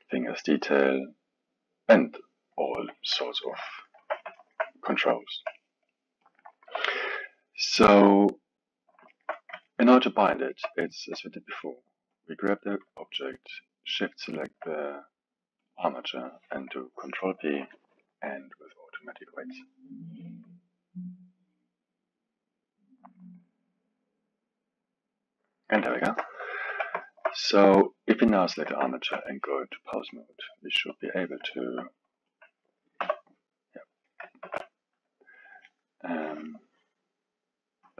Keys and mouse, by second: 0.2-3.2 drag, 3.3-4.0 ctrl+middle drag, 4.0 KP_1, 4.4-6.2 alt+middle drag, 6.2-7.0 drag, 7.0-12.1 middle drag, 12.1 click, 14.0 shift+click, 15.6-17.4 drag, 17.4 ctrl+p, 25.9-26.6 ctrl+middle drag, 26.6 KP_1, 27.0-27.8 alt+middle drag, 27.8 click, 28.4-30.1 ctrl+middle drag, 30.1-31.5 drag, 31.5-32.3 alt+middle drag, 32.3 click, 33.0 r, 34.4 shift+z, 35.6-37.8 middle drag, 37.8 click.